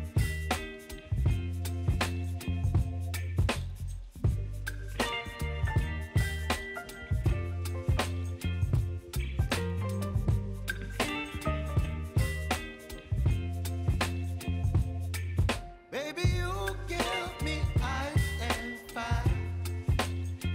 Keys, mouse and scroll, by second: 0.0 click, 1.5 ctrl+t, 2.1 click, 2.6 ctrl+a, 3.0 ctrl+v, 4.3 ctrl+a, 5.7 click, 6.3 Return, 7.9 ctrl+a, 10.0 click, 13.1 alt+scroll up 1, 15.2 ctrl+alt+Home, 16.2-19.2 drag, 19.2 s, 19.8-20.5 drag.